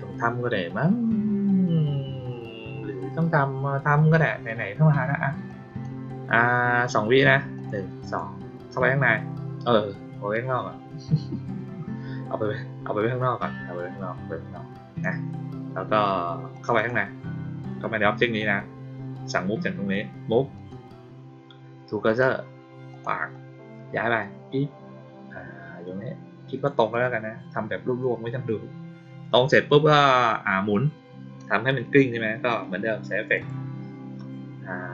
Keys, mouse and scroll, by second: 5.4 click, 7.5 click, 8.0 click, 10.5-14.9 drag, 16.5 click, 16.7 click, 20.5 click, 22.0 click, 22.8 click, 24.1-26.6 drag, 33.3 click.